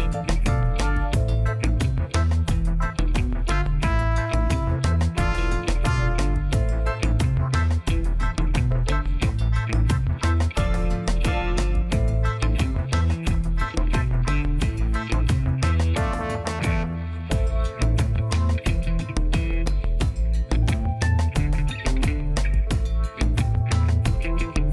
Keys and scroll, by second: 0.2 c, 0.5 Return, 2.8 ., 3.0 2, 3.3 Return, 4.2 Tab, 7.9 Tab, 19.9 Tab, 24.4 2.